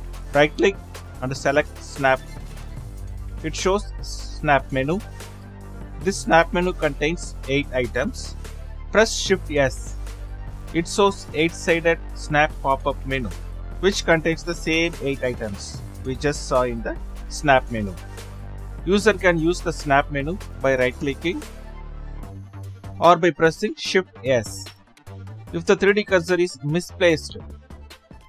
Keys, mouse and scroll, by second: 27.0 click.